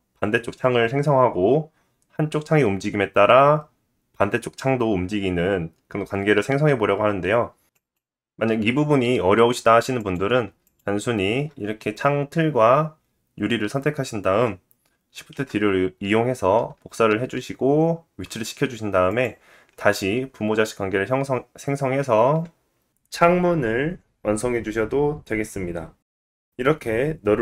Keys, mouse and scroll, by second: 7.7 click, 8.0-10.0 middle drag, 10.0 click, 10.2-10.7 middle drag, 10.7 shift+click, 15.3 shift+d, 23.1 click, 23.8 ctrl+click, 25.0 ctrl+p, 27.1 click.